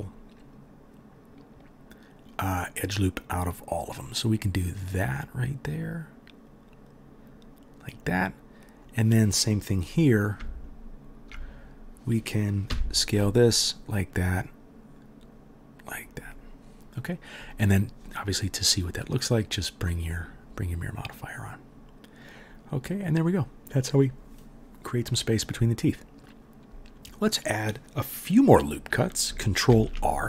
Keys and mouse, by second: 8.9-10.4 middle drag, 8.9 right click, 10.7 alt+middle click, 10.7 alt+right click, 12.6 s, 18.9 middle click, 18.9 right click, 25.7 middle click, 25.7 right click, 29.7 ctrl+r.